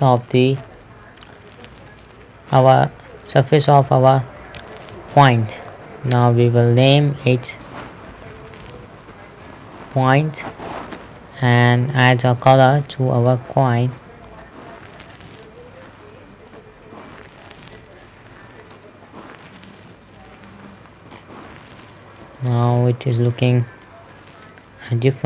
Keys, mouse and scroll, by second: 0.3-0.7 scroll down 2, 2.3 click, 5.2 shift+middle click, 7.3 click, 8.6 Caps_Lock, 8.9-10.3 typing, 10.8 Return, 12.9 click, 14.6 scroll down 1, 15.8 click, 19.7 scroll down 1, 20.0 middle click, 21.5-21.8 scroll up 1, 22.3 shift+middle click, 22.8 scroll up 1, 22.9 middle click, 24.6 scroll down 1.